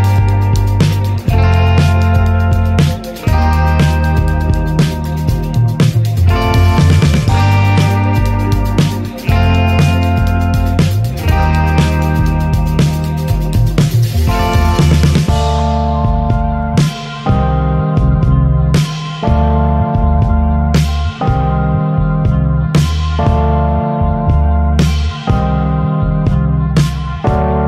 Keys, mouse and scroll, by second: 2.0 click, 3.0 click, 4.0 middle click, 4.3 scroll down 3, 4.5-5.0 shift+middle drag, 5.0 ctrl+s, 5.6 click, 7.0 scroll down 1, 7.2-8.0 middle drag, 8.0 ctrl+s, 8.5 scroll down 2, 9.1-9.5 middle drag, 9.5 ctrl+s, 10.1 click, 11.1 click, 11.5-13.7 middle drag, 13.7 click, 15.0 click, 15.7-16.5 middle drag, 16.5 click, 18.0-18.5 drag, 18.5-19.9 middle drag, 19.9-21.5 scroll up 1, 21.5 click, 23.1 click, 23.7-24.0 scroll down 3, 24.0 middle click, 24.2 scroll up 1, 25.4 /, 25.8-27.0 middle drag, 27.0 click.